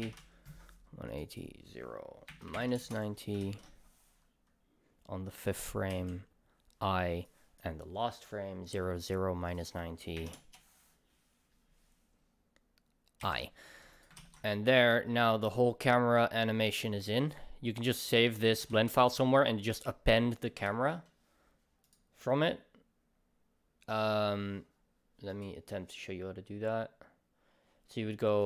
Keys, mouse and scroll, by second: 1.1 click, 1.3-7.3 drag, 2.9 Return, 5.9 i, 7.3-7.9 right drag, 10.4-14.0 drag, 10.5 Return, 14.2 ctrl+s, 14.8-18.3 right drag, 18.3 drag, 18.7 ctrl+s, 24.2 ctrl+s.